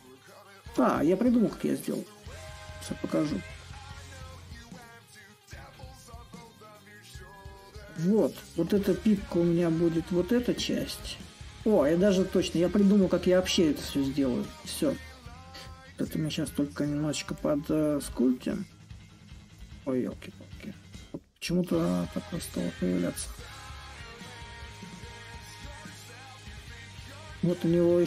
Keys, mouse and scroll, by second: 3.4-10.9 middle drag, 10.9-12.5 drag, 14.3-19.2 drag, 19.8-24.9 drag.